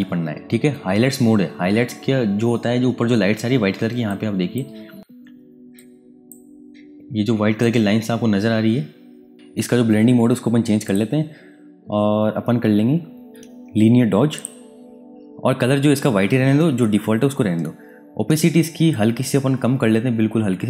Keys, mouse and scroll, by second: 3.7 space, 3.8 ctrl+click, 4.3 space, 5.5 ctrl+click, 7.2 space, 7.3 click, 10.8 click, 14.3 click, 18.8 click.